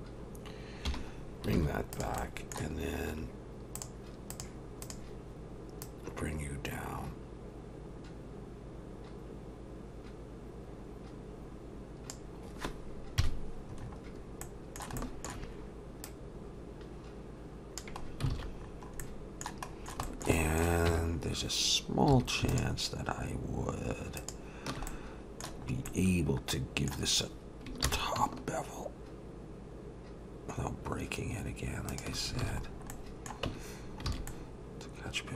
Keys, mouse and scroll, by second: 0.9 /, 1.3 scroll down 2, 1.6 alt+a, 1.9 click, 2.2 middle click, 3.8 click, 5.8 click, 13.2 KP_Decimal, 13.8-14.4 scroll up 1, 14.4 middle click, 14.4-14.7 scroll up 4, 15.0 shift+middle click, 16.0 click, 18.1-19.0 scroll down 6, 18.3 alt+a, 19.0 middle click, 20.0 shift+middle click, 20.0 scroll up 3, 20.4 middle click, 20.9 Tab, 21.2-21.6 scroll up 2, 22.1 2, 22.5 alt+shift+click, 24.9 middle click, 25.6-27.2 scroll up 3, 25.9 middle click, 27.9 ctrl+b, 32.4 alt+a, 32.6 scroll down 3, 32.9 middle click, 33.5 Tab, 33.8 scroll down 2, 34.1 alt+a, 34.3 middle click.